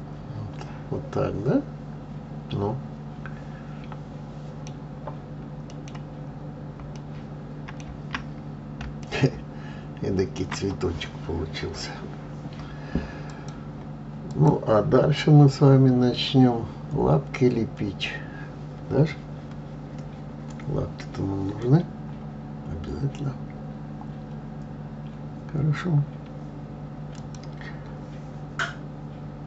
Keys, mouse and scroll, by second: 0.1-3.1 middle drag, 5.2 scroll down 4, 6.0-6.6 middle drag, 6.6-7.3 scroll up 1, 7.3-8.6 middle drag, 8.6-9.3 scroll up 2, 9.3-12.3 shift+middle drag, 23.7 scroll down 2, 25.0-26.5 scroll down 1.